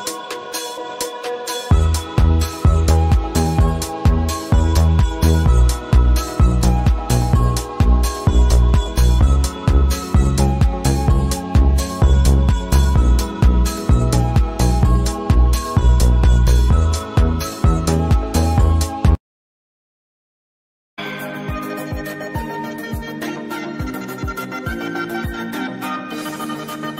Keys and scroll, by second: 4.5 v, 10.0 space, 20.6 space, 23.8 space.